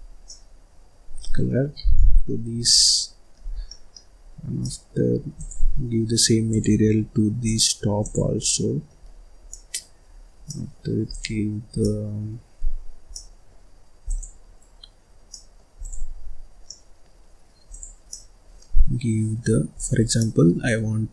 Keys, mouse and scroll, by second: 0.2-1.8 middle drag, 1.8 scroll down 2, 1.9 middle click, 2.5 scroll up 1, 2.7 scroll down 1, 2.9 middle click, 3.5 scroll down 1, 3.7 middle click, 4.1-4.6 scroll up 1, 4.6 middle click, 5.1 scroll up 1, 5.3 click, 6.5 click, 7.6 click, 8.5 middle click, 9.1-9.5 scroll up 2, 9.5 middle click, 10.0-10.4 scroll up 2, 10.4 scroll down 1, 10.5 middle click, 11.1 click, 11.8-14.5 middle drag, 14.5 click, 15.3 middle click, 15.8 click, 16.2-16.5 scroll up 1, 16.5 scroll down 1, 16.6 middle click, 17.2-17.6 scroll up 1, 17.6 click, 18.0-19.7 middle drag, 19.7 click, 20.1 middle click, 20.6-21.1 scroll up 4.